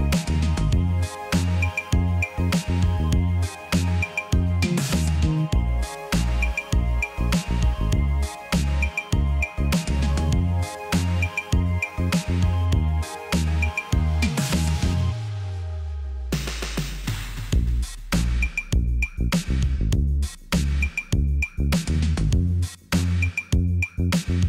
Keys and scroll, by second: 1.8 Escape, 2.4 ctrl+z, 4.6 typing, 5.6 Return, 8.8 Escape, 10.1 typing, 10.5 Return, 12.1 l, 15.5 Escape, 17.4 t, 18.6 typing, 18.9 Return, 20.5 l.